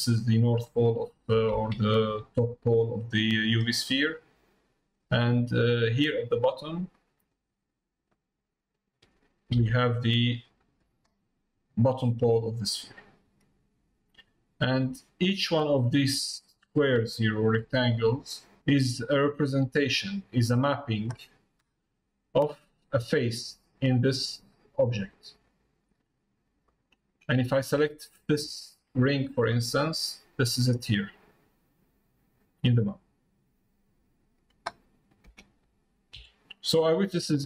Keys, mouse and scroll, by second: 2.2 middle click, 3.3 middle click, 4.0 middle click, 5.2 scroll down 1, 5.3 middle click, 5.8 scroll down 1, 6.2 middle click, 6.9 click, 8.1 click, 11.3 middle click, 14.2 click, 15.0 click, 15.8 click, 16.2 click, 16.9 click, 17.3 click, 17.7 click, 18.9 click, 19.9 click, 21.9 middle click, 22.6 middle click, 24.0 click, 26.6 middle click, 30.1 scroll down 1, 30.2 scroll up 1.